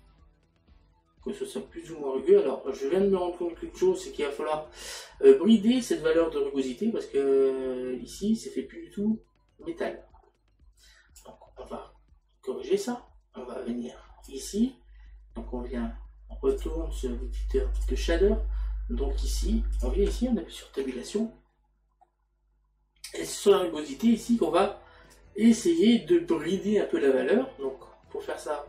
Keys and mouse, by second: 12.9 click, 16.6 click, 17.8 click, 19.8 click, 20.8 Tab, 22.1 middle click, 25.2 click.